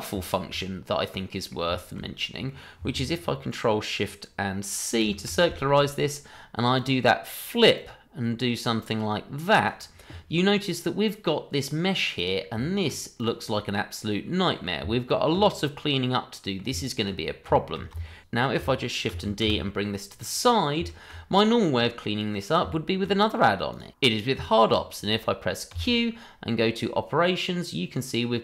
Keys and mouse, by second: 0.2 shift+middle drag, 0.6-1.5 middle drag, 1.7 shift+middle drag, 2.2 middle click, 5.0 ctrl+shift+c, 6.7 click, 7.7-9.7 drag, 10.4-11.9 middle drag, 12.2 click, 12.5 Tab, 13.1 click, 13.7-14.5 middle drag, 16.0-16.6 middle drag, 17.5 shift+middle drag, 18.2 y, 19.1 shift+d, 19.4 y, 20.4 middle drag, 20.8 shift+middle drag, 21.3 middle drag, 22.7 shift+middle drag, 23.1 middle click, 23.7 click, 24.1 shift+middle drag, 24.8 shift+middle drag, 25.8 q.